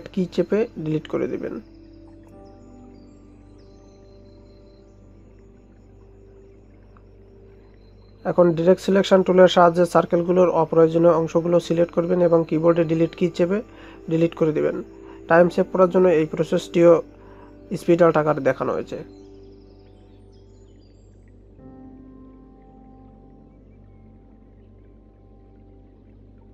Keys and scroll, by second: 2.9 Delete.